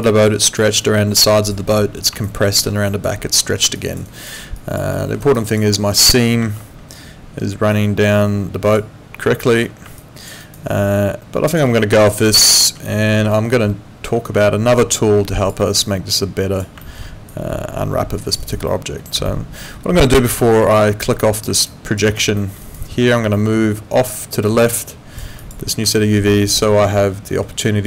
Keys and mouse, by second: 0.0 click, 0.4 alt+right click, 0.8 alt+click, 2.3 alt+click, 3.8 alt+click, 4.1 alt+right click, 4.6 alt+click, 4.9 alt+middle click, 5.2 alt+right click, 5.4 alt+click, 6.4 ctrl+2, 9.5 Escape, 10.0 alt+click, 10.4 alt+right click, 10.7 alt+click, 12.5 alt+middle click, 13.3 alt+middle click, 15.8 alt+click, 17.3 alt+click, 18.4 alt+right click, 18.7 alt+middle click, 19.3 alt+middle click, 20.8 alt+middle click, 21.7 alt+click, 22.0 alt+right click, 22.4 alt+middle click, 22.6 alt+right click, 23.3 alt+middle click, 24.5 click, 25.9 alt+middle click, 27.6 alt+right click.